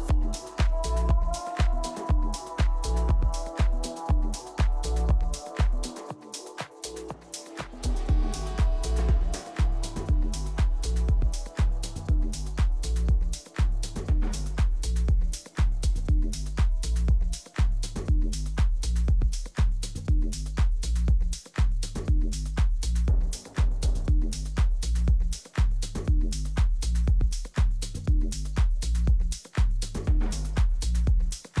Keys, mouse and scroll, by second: 1.4 e, 5.8-8.3 drag, 12.4 g, 14.7-17.2 middle drag, 20.5 e, 23.6 g, 25.5-31.6 middle drag, 30.7 a.